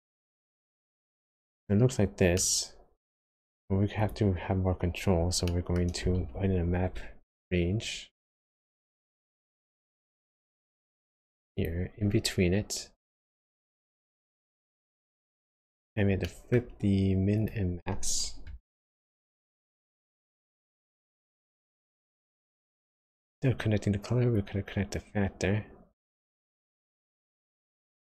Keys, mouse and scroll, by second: 2.4 middle click, 3.4-4.0 scroll up 2, 4.0 click, 4.6-5.2 scroll down 2, 5.5 shift+middle click, 5.8 shift+scroll up 1, 6.1 shift+a, 6.5 scroll up 1, 13.5 middle click, 15.7-16.2 scroll up 3, 16.2 middle click, 16.6 scroll up 1, 17.4 click, 19.8 click, 24.3 click.